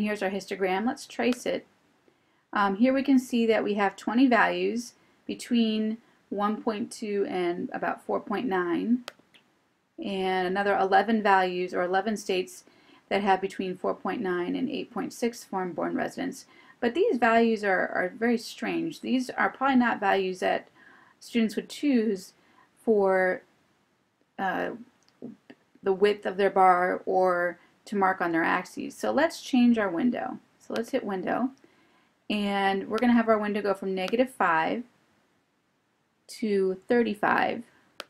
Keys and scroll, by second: 9.1 Right, 34.2 5.